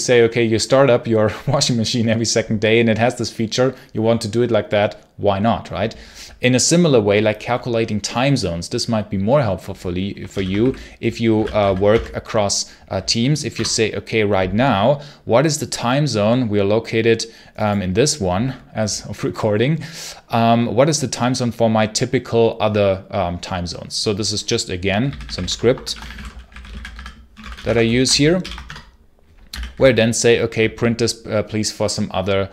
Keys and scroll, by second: 10.2 ctrl+l, 10.5-12.0 typing, 13.4 Return, 24.7-28.3 typing, 28.5 Return, 29.4 d, 29.6 d.